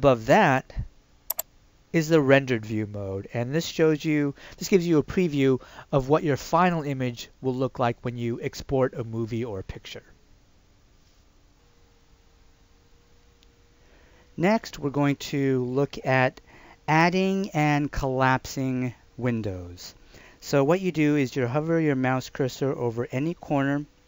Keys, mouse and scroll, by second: 1.3 click, 11.5 F2.